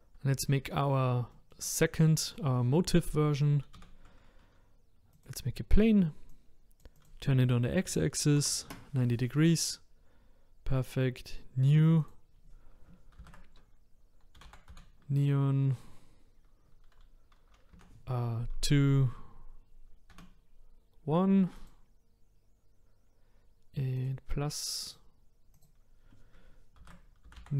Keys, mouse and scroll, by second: 1.3-1.7 shift+middle drag, 1.7-2.1 scroll down 1, 2.1-5.3 middle drag, 5.3 shift+a, 6.4-21.6 drag, 24.1-27.5 drag.